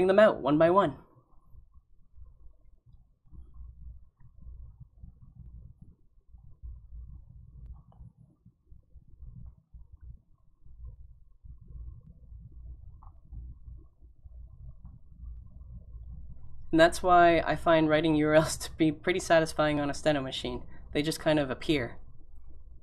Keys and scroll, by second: 1.2-2.3 typing, 16.7 s, 18.4 l, 20.2 u, 21.0 u, 22.2 u.